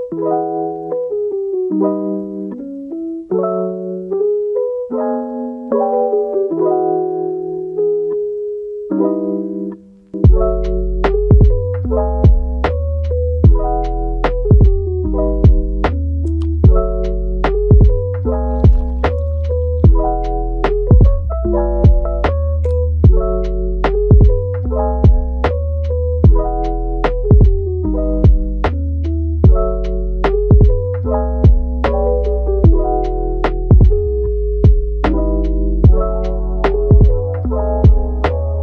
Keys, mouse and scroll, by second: 0.6 click, 0.8 g, 2.0 click, 2.6 click, 3.1 click, 3.8 click, 4.0 g, 7.4 scroll down 2, 7.6 middle click, 8.4-8.7 scroll up 5, 8.7-11.0 middle drag, 11.0 scroll down 5, 11.3-13.1 middle drag, 13.1-13.4 scroll up 5, 13.4-15.7 middle drag, 15.7-16.0 scroll down 4, 16.0-17.5 middle drag, 17.5-18.0 scroll up 4, 18.0 scroll down 1, 18.3-19.5 middle drag, 19.5 KP_7, 20.3-20.6 scroll up 3, 20.6 shift+middle click, 21.4 click, 22.1 click, 22.8 g, 25.4 click, 25.6 g, 26.6-27.0 scroll down 3, 27.7-28.4 scroll down 2, 28.4 scroll down 1, 28.6 Tab, 29.1-32.0 middle drag, 32.0 click, 32.6-33.3 middle drag, 33.3 r, 35.5-35.8 scroll down 1, 35.8-36.5 middle drag, 36.5-36.8 scroll up 1, 36.8 scroll down 2, 37.1 middle click, 37.7 shift+a.